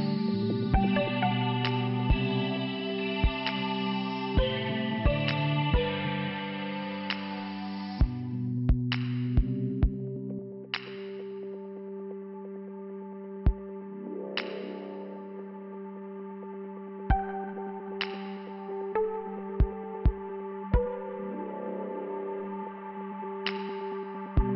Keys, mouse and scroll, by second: 0.8 click, 0.9 click, 1.8 click, 6.9 click, 11.6 click, 11.9 click, 13.1 click, 13.3 click, 14.8 Return, 14.8 scroll down 1, 16.5 f, 19.1 scroll down 1, 19.1 p, 19.9 click, 20.8 scroll down 1, 21.7 scroll down 1, 21.7 click, 23.6 scroll up 1.